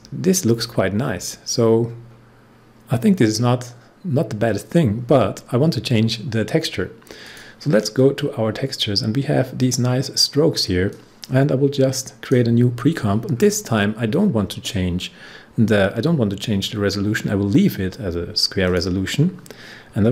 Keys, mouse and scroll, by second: 1.8-2.4 scroll down 1, 2.4-3.4 scroll up 1, 3.4-4.2 scroll down 1, 4.5 scroll up 1, 7.2 click, 9.5-13.3 drag, 13.3 scroll down 1, 14.3-14.8 scroll down 1, 18.6 scroll down 1, 18.8-20.1 drag.